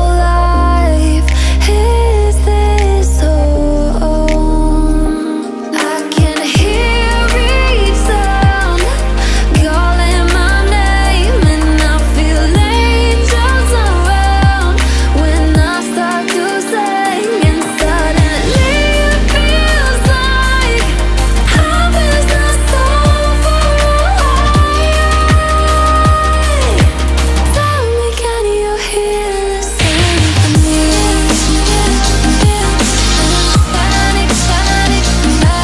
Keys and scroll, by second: 8.7 ctrl+v.